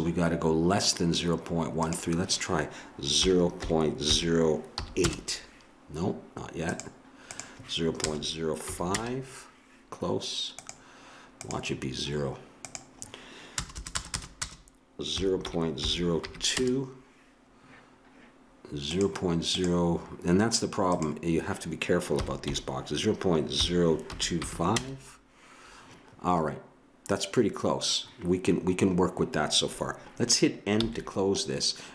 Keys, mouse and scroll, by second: 6.7-9.0 drag, 10.6-13.7 drag, 13.7 BackSpace, 14.1 BackSpace, 18.9-24.7 drag, 30.7 n.